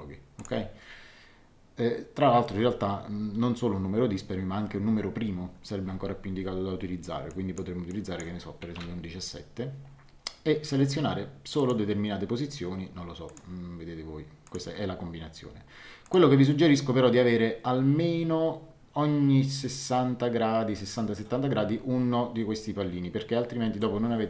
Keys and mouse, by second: 0.3 click, 7.3 click, 8.7 KP_1, 8.8 KP_7, 11.5 click, 13.2 click, 14.4 click, 16.0 click.